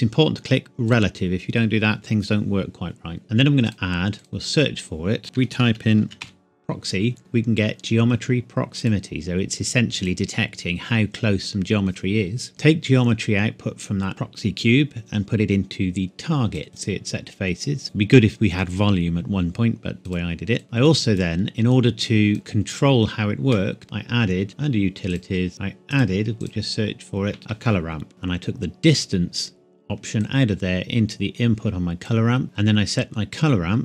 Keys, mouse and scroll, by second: 0.9 click, 3.7 click, 5.2-6.2 typing, 8.8 click, 12.5 click, 25.1 click, 25.9 click, 27.4 typing, 28.1-29.4 scroll up 1, 29.4-30.2 scroll down 1, 30.2 click.